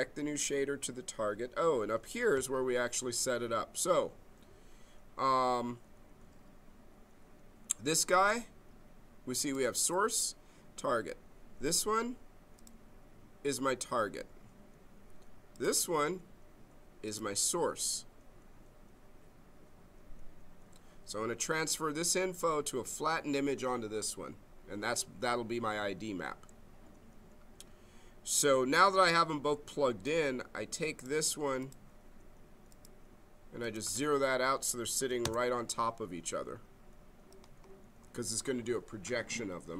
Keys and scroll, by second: 35.0 0, 35.2 Return.